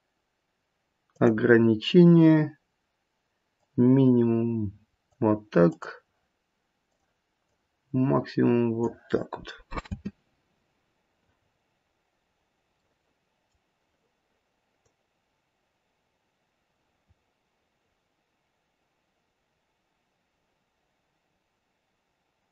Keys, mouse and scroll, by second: 3.6 click, 5.6 click, 6.8 click, 7.4 click, 9.8 space, 11.4-12.2 scroll up 4, 12.4 scroll down 1, 12.7 middle click, 14.8 click.